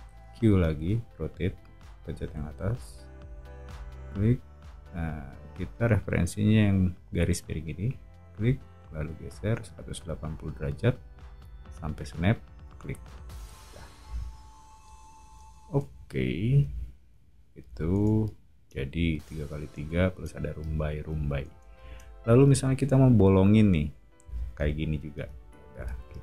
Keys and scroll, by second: 0.3 q, 2.1 scroll up 1, 13.6 o, 26.1 space.